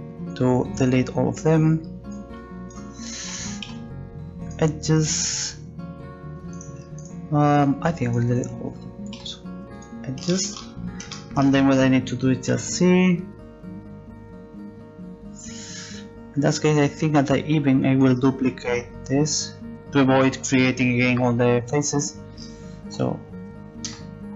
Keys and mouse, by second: 3.7 x, 6.5-10.3 right drag, 9.2 x, 10.6-15.7 middle drag, 12.5 c, 22.8 shift+d.